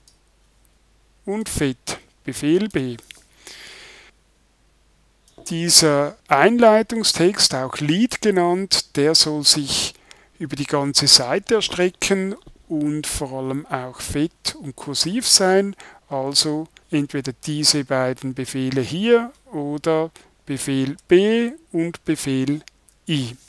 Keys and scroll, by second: 2.7 super+b, 21.0 super+b, 22.8 super+i.